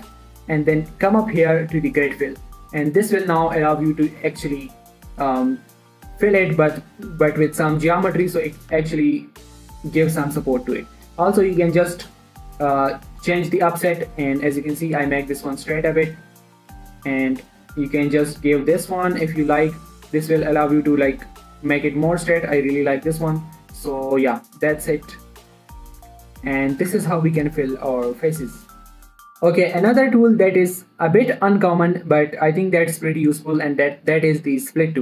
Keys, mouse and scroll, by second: 0.4 ctrl+f, 2.5 click, 3.2-4.8 middle drag, 4.8-5.8 scroll down 1, 5.8 scroll up 1, 6.0 middle click, 10.4-14.0 drag, 14.0 right click, 14.5 middle click, 16.7 click, 21.1 middle click, 23.4 scroll up 1, 23.6 middle click, 24.2 click, 25.0 alt+shift+click, 25.6 alt+scroll down 1, 25.8 middle click, 26.4 Tab, 26.6 scroll down 1, 26.7 middle click, 26.9 scroll up 1, 27.2 middle click, 29.2 x, 29.3-30.9 scroll up 1.